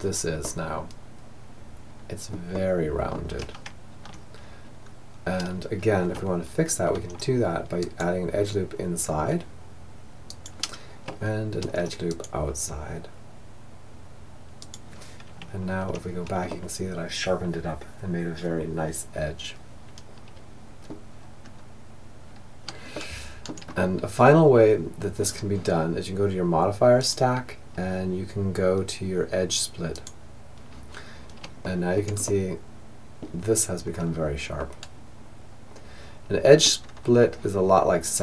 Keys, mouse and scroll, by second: 1.5-3.4 middle drag, 2.7 Tab, 3.8-6.0 middle drag, 6.0 ctrl+r, 10.7 ctrl+r, 14.4 Tab, 15.5-17.5 middle drag, 20.2-26.9 middle drag, 26.9 click, 30.6-35.5 middle drag, 35.8-37.9 middle drag.